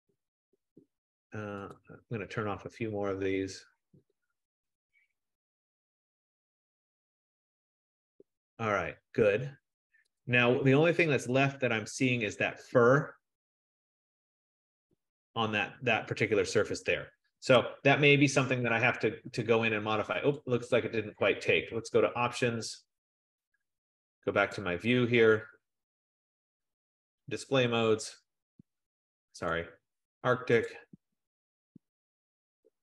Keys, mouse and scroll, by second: 1.9 click, 2.6 click, 3.5 click, 4.2 click, 5.0 click, 6.5 click, 7.9-8.4 scroll, 10.3 click, 11.5 scroll, 11.8 click, 17.5 Escape, 20.4 click, 22.4 click, 24.7 click, 25.3 click, 27.4 click, 29.6 click, 30.9 click, 31.6-32.8 scroll.